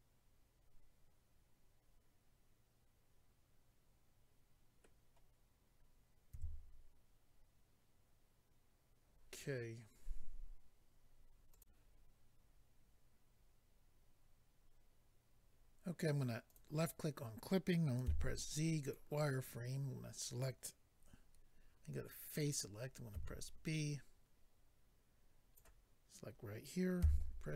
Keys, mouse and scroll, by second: 6.3 a, 11.5 click, 16.5 click, 16.5 click, 18.0 z, 18.8 click, 22.3 click, 23.1 b, 23.6 click, 27.0 z.